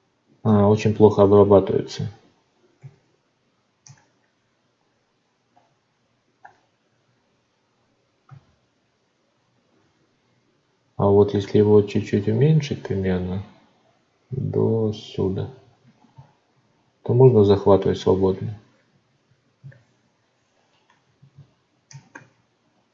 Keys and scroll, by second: 2.7 ctrl+z, 21.3 ctrl+z.